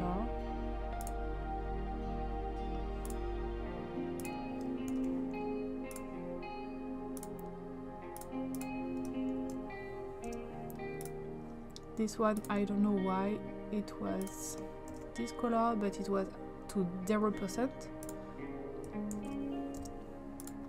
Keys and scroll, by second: 4.9 ctrl+c, 9.4 ctrl+v, 10.3 Return, 14.9 ctrl+c, 19.1 ctrl+v, 19.8 Return.